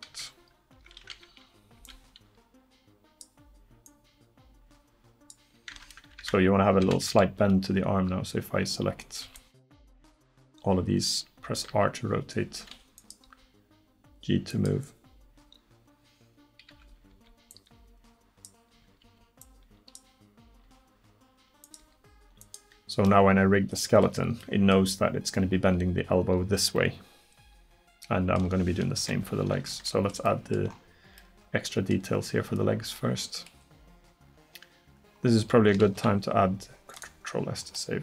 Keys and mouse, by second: 0.1 a, 1.8 b, 3.9-5.8 drag, 5.8 Tab, 6.2 Tab, 6.9 a, 9.3 b, 11.7 r, 13.3 g, 16.7 a, 17.2 b, 18.8 a, 19.1 b, 20.6 r, 21.8 g, 26.8 middle click, 29.0 KP_1, 30.3 middle click, 33.2 middle click, 35.9 ctrl+s.